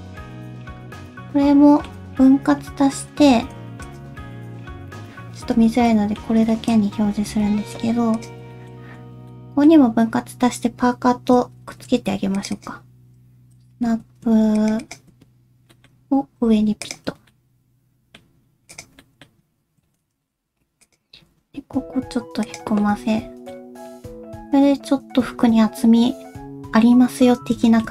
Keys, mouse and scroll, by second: 0.1 middle click, 1.1 alt+z, 1.3 middle click, 2.8 scroll down 1, 3.1 Tab, 3.8 shift+click, 5.6 /, 5.9 middle click, 6.5 shift+middle click, 6.8-7.5 scroll up 1, 7.5-8.2 scroll up 2, 8.2 click, 8.5 shift+middle click, 8.7 scroll up 1, 9.0 Tab, 9.3 middle click, 11.6 ctrl+r, 13.9 1, 14.6 shift+click, 14.8 shift+click, 15.7 middle click, 16.4 g, 17.2 scroll down 1, 17.3 middle click, 18.2-18.6 scroll up 1, 18.7 click, 19.0 middle click, 19.8 shift+Tab, 20.3 s, 20.7 scroll up 1, 21.2 alt+s, 21.4 click, 22.8 middle click, 23.5-23.9 scroll down 1, 23.9 middle click, 26.9-27.5 scroll down 3, 27.7 shift+middle click.